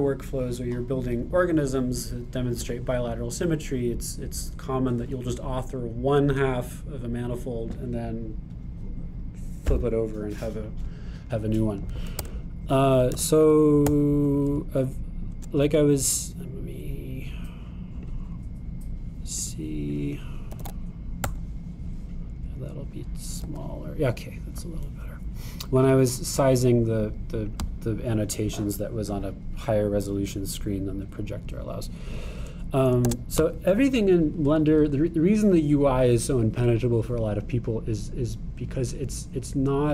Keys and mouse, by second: 13.2 Tab, 14.2 x, 19.0-20.5 drag, 21.0-31.0 drag, 24.5 g, 34.1 shift+a.